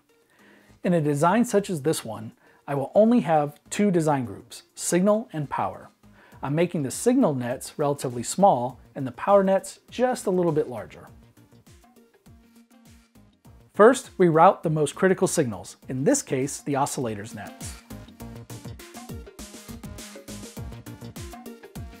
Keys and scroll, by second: 2.3-8.0 typing, 15.7 super+s.